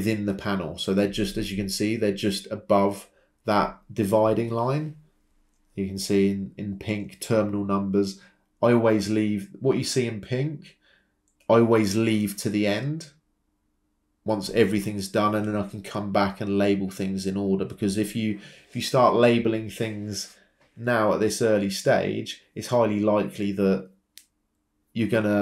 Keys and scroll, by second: 0.1 Return, 7.0 Escape, 13.6 Delete, 23.3 ctrl+c, 23.5 ctrl+v.